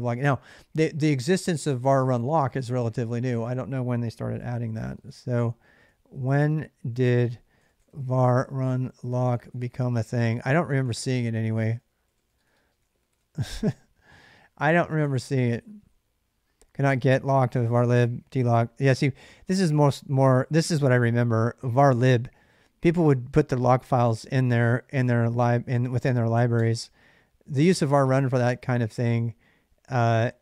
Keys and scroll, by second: 4.2-13.5 typing, 26.3 space.